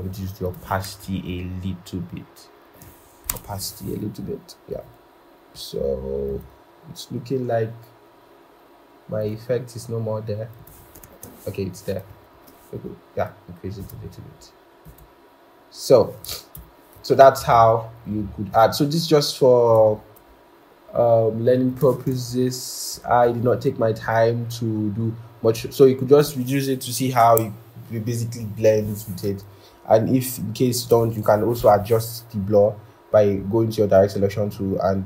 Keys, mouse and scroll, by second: 0.9 shift+Down, 1.1 shift+Down, 5.9 Tab, 12.2 shift+Up, 16.4 ctrl+-, 22.1 shift+Down, 22.8 shift+Down, 31.5 typing.